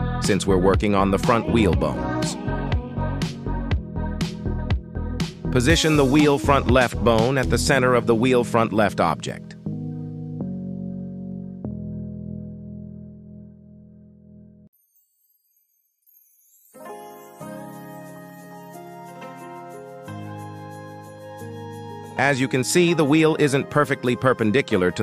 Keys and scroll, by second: 0.6 shift+s, 6.7 shift+s, 7.9 Tab, 8.9 shift+s, 10.3 KP_3, 17.0 KP_1.